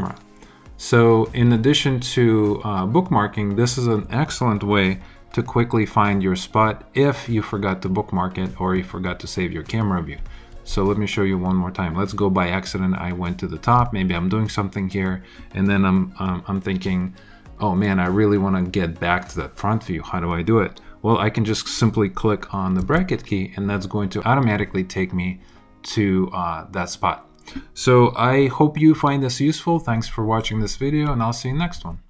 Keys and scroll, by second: 22.8 [.